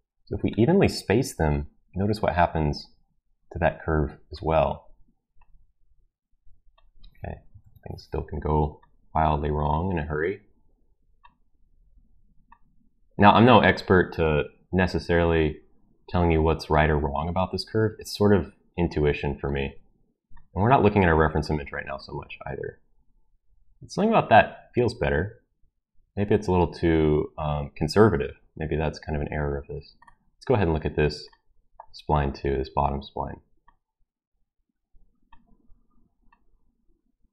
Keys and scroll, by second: 7.6 ctrl+z.